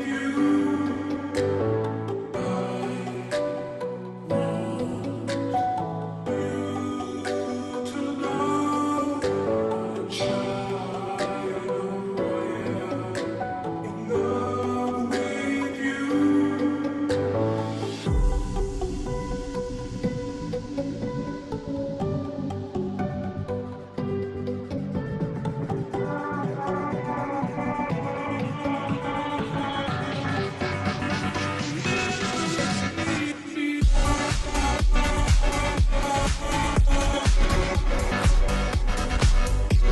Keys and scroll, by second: 0.7 Up, 1.5 Up, 2.6-4.0 Up, 4.6 Up, 5.2 Up, 5.8 Up, 8.7 Right, 8.7 Down, 9.7 Down, 11.8 Up, 11.8 Right, 14.4 Down, 14.4 Left, 14.4 ctrl+t, 19.9 Return, 20.4-21.5 Down, 21.7 Down, 21.8 Down, 27.1 Down.